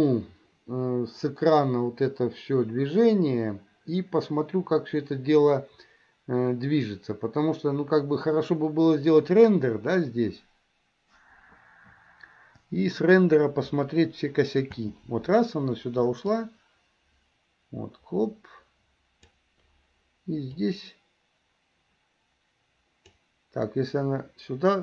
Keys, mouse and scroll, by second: 14.9 space, 16.5-19.6 drag, 20.7-23.3 drag.